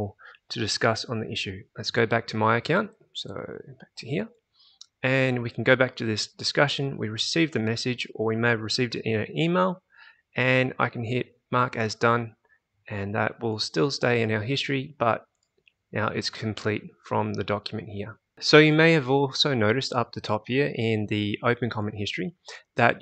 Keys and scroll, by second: 1.7 alt+Tab, 2.9 alt+Tab.